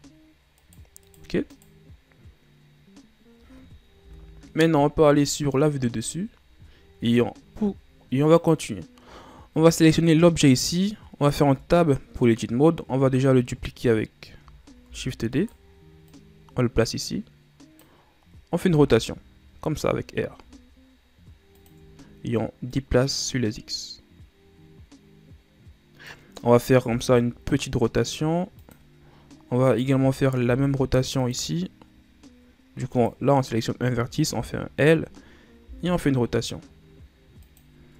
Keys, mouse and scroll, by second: 0.8 right click, 1.2 right click, 1.6 right click, 4.2 KP_7, 5.1-6.7 shift+scroll down 7, 6.7-8.5 ctrl+scroll up 2, 8.5 right click, 11.6 Tab, 13.1 a, 15.0 shift+d, 16.2-18.7 drag, 18.7 r, 22.9-26.0 drag, 27.0 r, 29.8 right click, 30.6 i, 33.1 right click, 34.5 l, 35.8 r.